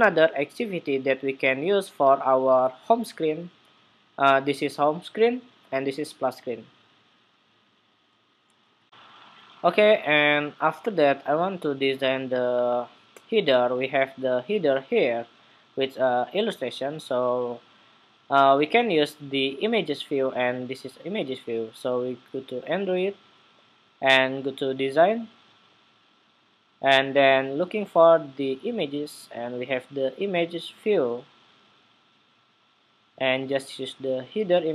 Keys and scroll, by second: 8.6 shift+super+2.